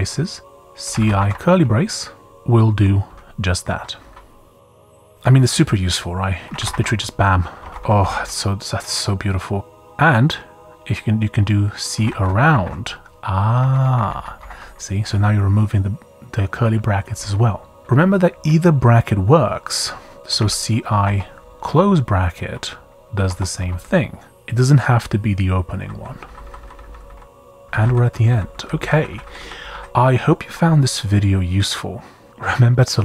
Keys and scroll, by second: 0.0-1.7 typing, 3.6 Escape, 4.0-5.1 typing, 6.2-7.7 typing, 7.6 Escape, 7.9 Up, 8.1 Up, 11.7-13.7 typing, 13.6 Escape, 14.0 Up, 14.1 Up, 14.4 Down, 14.6 Up, 20.0-21.0 typing, 23.2 Escape, 23.6-24.2 typing, 25.7-30.2 typing.